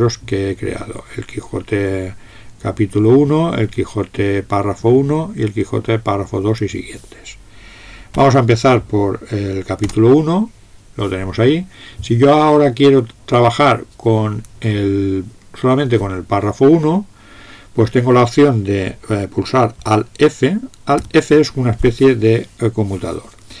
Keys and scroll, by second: 8.1 Up, 21.1 alt+f.